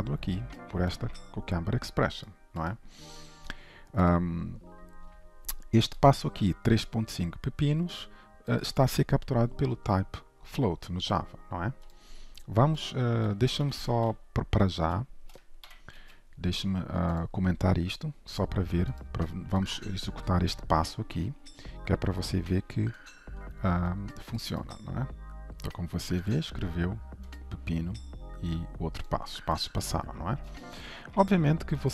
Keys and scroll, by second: 6.2 ctrl+b, 15.8 ctrl+/, 16.0 ctrl+s, 23.1 alt+1, 25.2 ctrl+shift+F10, 29.9 ctrl+shift+F12.